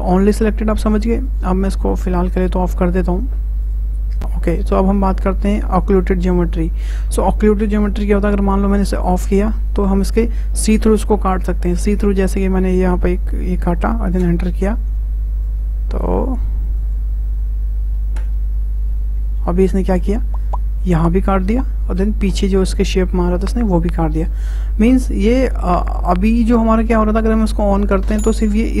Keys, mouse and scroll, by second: 1.3-4.2 drag, 4.2 ctrl+z, 9.1 click, 12.5-18.5 drag, 18.9-23.7 middle drag, 23.7 `, 27.7 click, 28.5-28.8 drag.